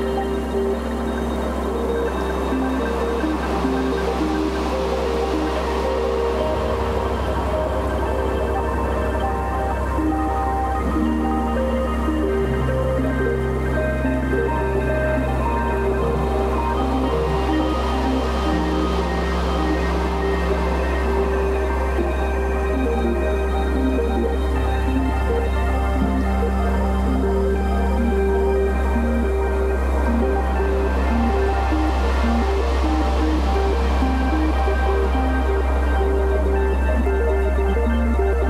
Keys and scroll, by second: 2.4 space, 3.0 x, 3.7 space, 4.7 x, 5.8 space, 6.6 space, 7.1 space, 7.6 space, 8.8 super+z, 9.3 [, 11.4 v, 11.8 space, 14.9 space, 19.6 super+i, 20.1-21.9 typing, 23.6 ], 24.1 [, 25.4 ], 25.9 [, 26.7 ], 27.7 [, 28.7-32.5 typing, 33.6 v.